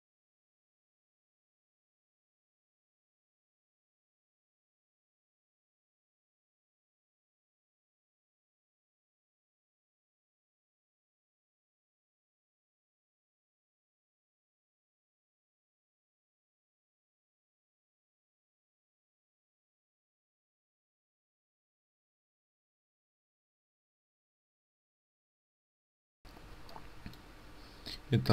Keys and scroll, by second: 24.7 ctrl+space, 24.7 ctrl+z.